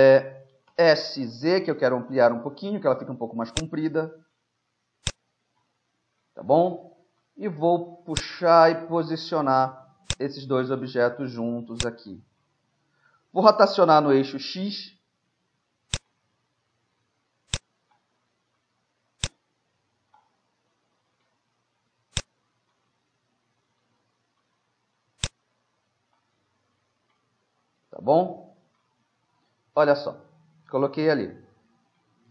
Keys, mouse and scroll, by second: 0.7 s, 3.9-5.1 middle drag, 5.1-7.0 drag, 6.8 middle click, 8.3-9.8 drag, 9.8-11.1 middle drag, 11.1 click, 11.8 middle click, 11.9-13.4 drag, 13.4 middle click, 13.9 r, 16.3-17.9 middle drag, 17.9-20.1 drag, 20.1 right click, 21.0-27.2 middle drag, 22.2-23.9 drag, 25.2-26.8 drag, 26.8 right click, 28.6-31.8 middle drag.